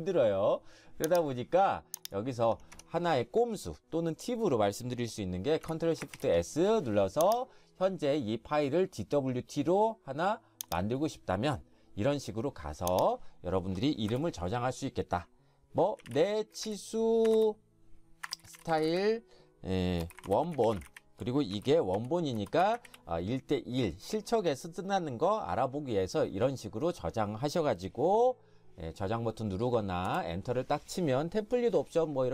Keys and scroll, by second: 2.7 Escape, 6.1 ctrl+shift+s, 16.0-23.3 typing, 30.1 Return.